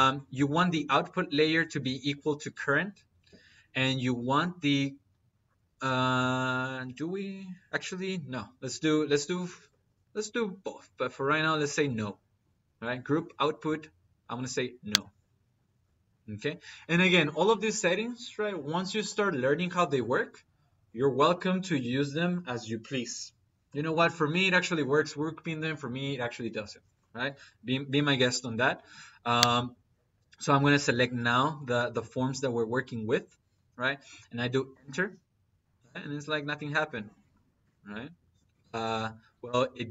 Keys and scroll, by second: 34.5 space.